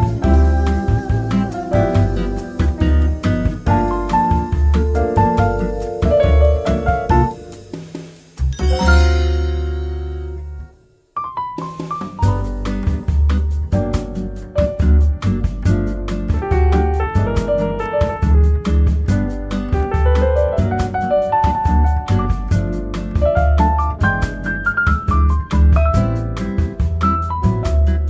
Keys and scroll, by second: 5.6 ctrl+z, 9.3 ctrl+s, 9.4 8, 9.6 F2, 16.4 ctrl+z, 18.3 ctrl+z, 18.7 Tab, 19.7-22.5 typing.